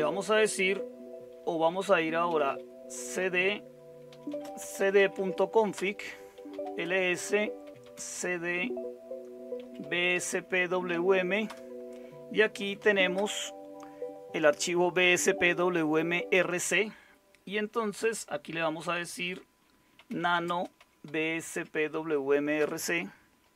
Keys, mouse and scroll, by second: 2.0-2.9 typing, 3.2 Return, 4.1-13.6 typing, 5.7 Return, 19.7-21.6 typing, 22.6 Return.